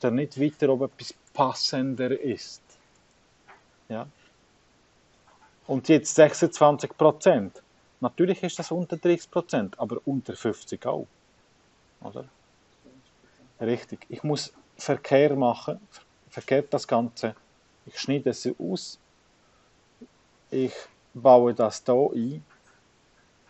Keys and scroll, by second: 0.0-13.0 typing, 14.7 BackSpace, 16.3 BackSpace, 17.1 BackSpace, 18.9 BackSpace, 20.5 BackSpace, 21.4 BackSpace, 23.0 BackSpace.